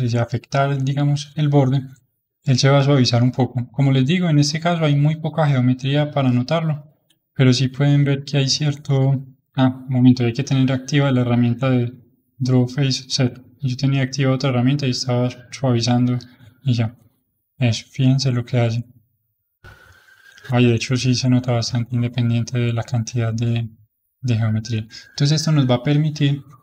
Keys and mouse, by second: 6.8-7.9 middle drag, 7.9-18.2 shift+drag, 18.2-20.1 middle drag, 20.1 shift+click, 20.9-21.9 middle drag, 21.9-23.1 shift+drag, 23.1-24.1 middle drag, 24.1-25.7 shift+drag, 25.7-26.6 middle drag.